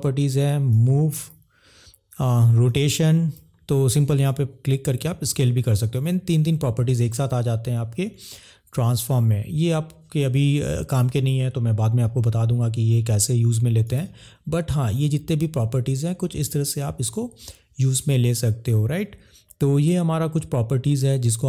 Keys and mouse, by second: 0.8 click, 3.4 ctrl+z, 4.2 click, 16.4 click.